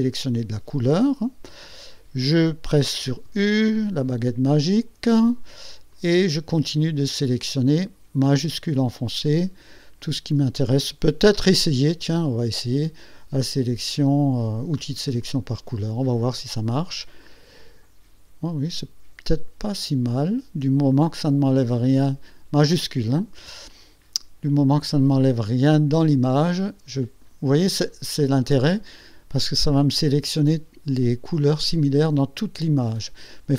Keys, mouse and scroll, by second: 3.3 u, 6.0 click, 8.4 shift+click, 9.4 shift+click, 15.3 click, 17.3 shift+click, 21.9 shift+click, 24.9-27.5 drag, 31.7-33.5 drag.